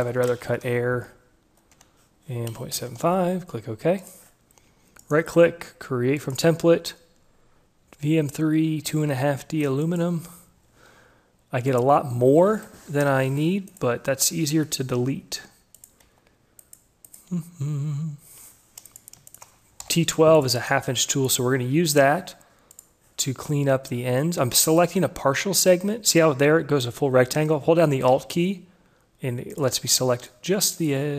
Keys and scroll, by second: 0.3 shift+Left, 0.5 1, 0.6 2, 0.8 5, 1.0 Tab, 2.8 Delete, 3.1 5, 3.3 Tab, 14.9 Delete.